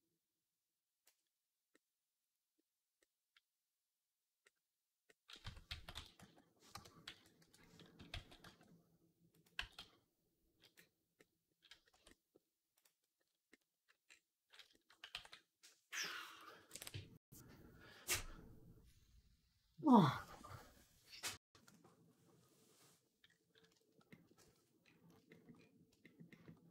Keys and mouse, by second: 5.3 Tab, 5.5 a, 5.8 s, 6.9 ., 8.0 s, 8.5 s, 9.3-26.7 middle drag, 9.4 g, 11.8 Tab, 12.6 click, 15.0 ctrl+s, 24.3 shift+c.